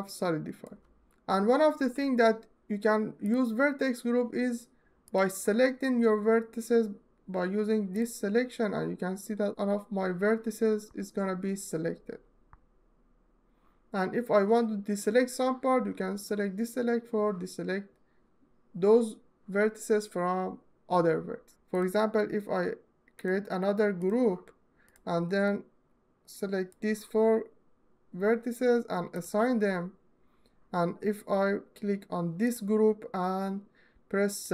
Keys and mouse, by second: 2.9 middle click, 4.7 click, 21.5-23.8 drag, 24.5 click, 25.1-26.5 drag, 32.1 click.